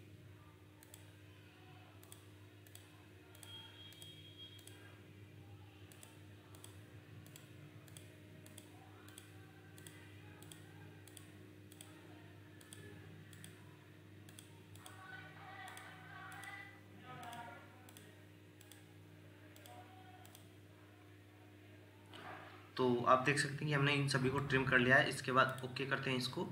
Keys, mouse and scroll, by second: 14.7 double click, 21.6 scroll up 1, 23.2 middle click.